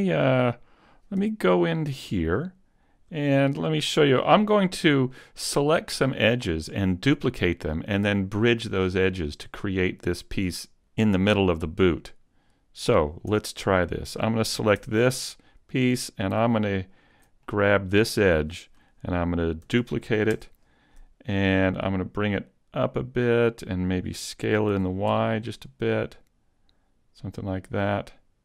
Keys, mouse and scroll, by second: 1.2 z, 1.5 middle click, 2.8-3.4 scroll up 2, 3.2 shift+middle click, 12.0 middle click, 13.3 Tab, 14.1 right click, 14.7 Tab, 15.1 middle click, 16.9 alt+right click, 17.4 middle click, 19.7 shift+d, 22.5 click, 24.7 s, 27.1 click, 27.7 click.